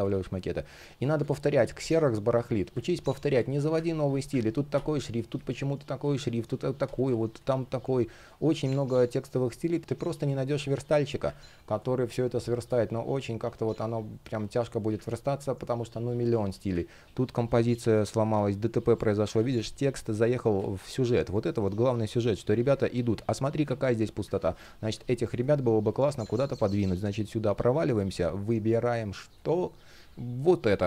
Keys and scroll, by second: 0.8 space, 3.0 space, 8.1 space, 11.4 space, 17.0 shift+p, 17.5 space, 19.0 super+z, 20.2 super+z, 22.2 super+z, 23.9 super+z, 24.6 shift+p, 25.9 super+z.